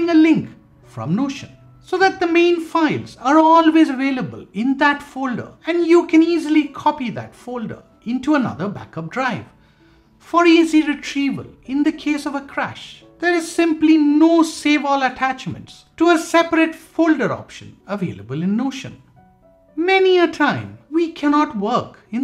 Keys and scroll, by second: 0.7 super+v.